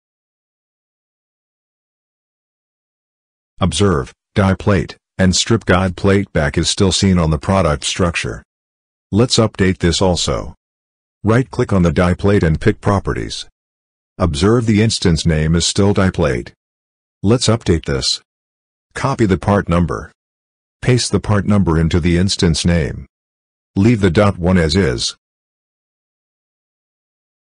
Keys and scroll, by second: 20.8 ctrl+c, 24.4 ctrl+v.